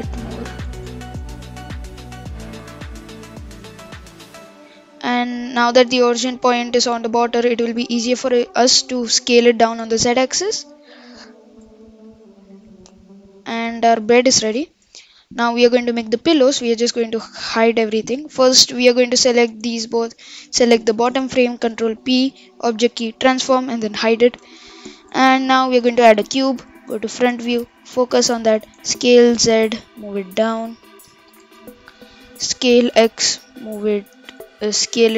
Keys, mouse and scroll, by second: 1.1 click, 2.1-2.9 scroll down 1, 2.9-3.2 middle drag, 3.2-3.7 scroll down 9, 4.3 click, 4.7 click, 5.0-5.7 scroll down 2, 5.7-6.8 middle drag, 6.8-7.2 scroll up 3, 7.2-7.9 middle drag, 7.9-9.9 scroll down 4, 9.9 s, 11.5 click, 11.8-12.3 scroll up 1, 12.3-15.0 middle drag, 16.2 click, 18.9 click, 19.7 shift+click, 21.0 shift+click, 21.7 ctrl+p, 23.9 h, 24.4-24.9 scroll up 3, 25.0 shift+a, 26.3 KP_1, 27.6 KP_Decimal, 28.3-28.6 scroll down 5, 28.6 s, 31.4 KP_7, 31.9-32.3 scroll down 1, 32.3 s.